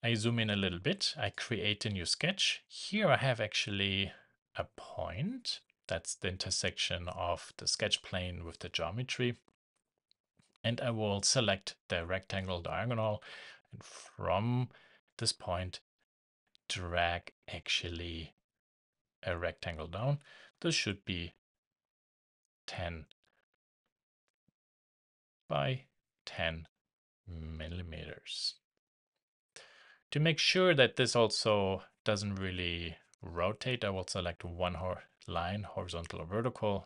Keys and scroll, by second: 25.3 shift+Tab, 27.4 shift+Return, 31.4 shift+Escape.